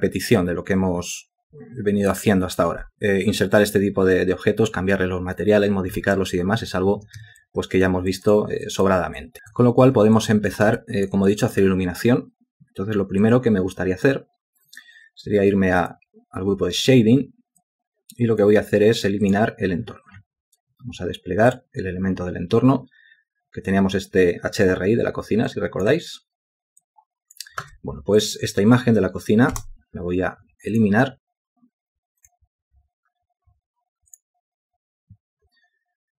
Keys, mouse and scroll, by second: 7.4 alt+click, 8.1 alt+click, 9.2 alt+click, 10.2 ctrl+alt+click, 10.8 alt+shift+click, 11.3 alt+click, 29.6 Delete.